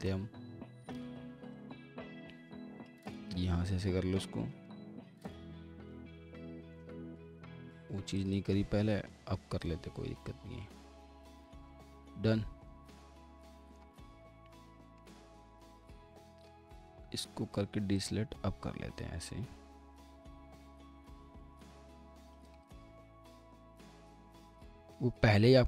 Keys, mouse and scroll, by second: 4.7 alt+middle click, 5.9 ctrl+z, 6.3 alt+middle click, 8.2 ctrl+click, 11.7 alt+middle click, 14.5 alt+middle click, 15.7 ctrl+z, 16.4 alt+click, 22.6 double click, 23.0 alt+middle click, 24.4 ctrl+click, 24.9 middle click.